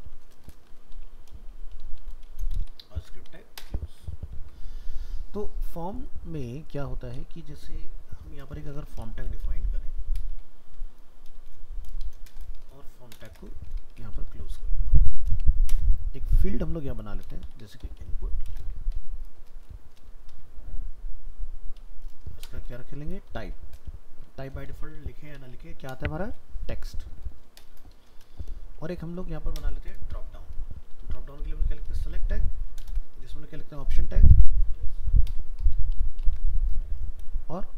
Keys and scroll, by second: 3.0 ctrl+s, 29.2 ctrl+s.